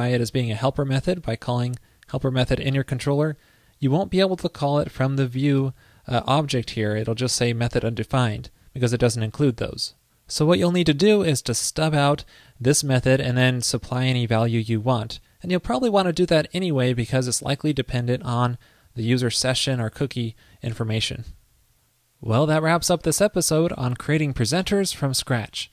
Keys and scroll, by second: 4.8 alt+Left, 5.7 alt+shift+Left, 8.0 super+Right.